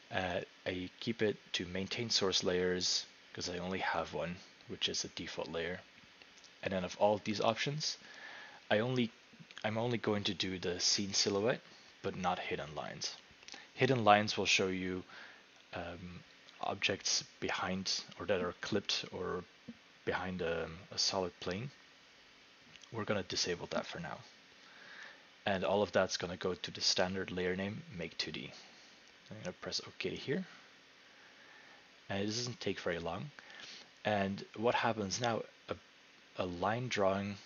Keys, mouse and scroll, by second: 30.3-33.3 drag.